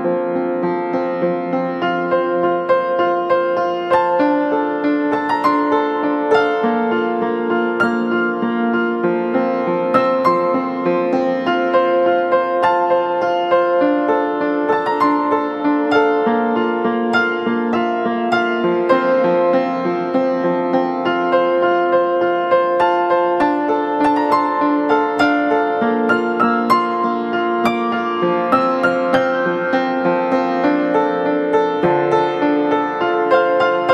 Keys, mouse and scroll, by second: 3.5 right click, 11.6 double click, 14.0 ctrl+d, 15.9 ctrl+-, 16.2 ctrl+-, 19.6-20.2 alt+scroll up 1.